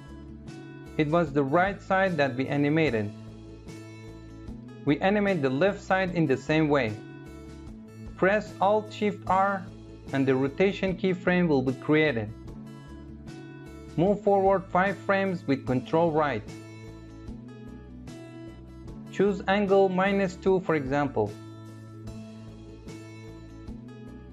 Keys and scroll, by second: 8.2 alt+shift+f, 14.8 ctrl+Right.